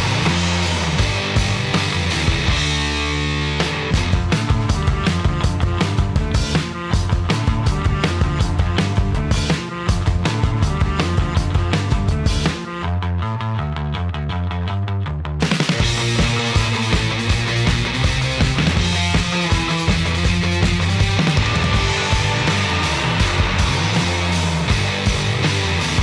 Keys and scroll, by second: 1.9 shift+1, 2.7 Return.